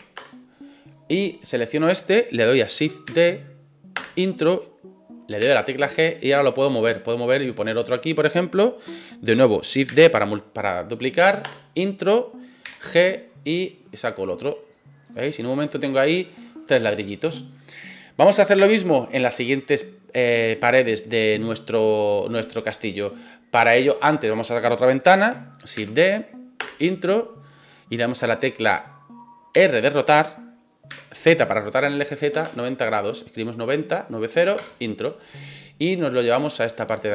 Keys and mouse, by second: 3.1 shift+d, 3.9 Return, 5.4 g, 7.8 click, 9.8 shift+d, 11.4 Return, 12.6 g, 14.6 click, 15.0 right click, 15.3-16.2 middle drag, 23.9 right click, 25.7 shift+d, 26.5 Return, 29.5 r, 30.9 z, 32.3 KP_9, 32.4 KP_0, 34.6 KP_Enter, 36.1-37.1 drag.